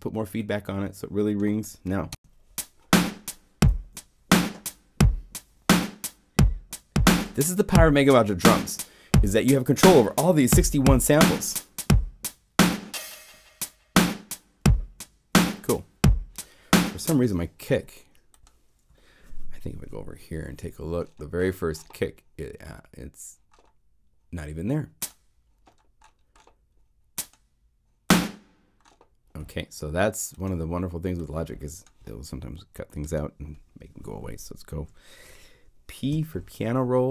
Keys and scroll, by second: 2.1 Home, 17.4 space, 19.7 super+7, 36.1 p.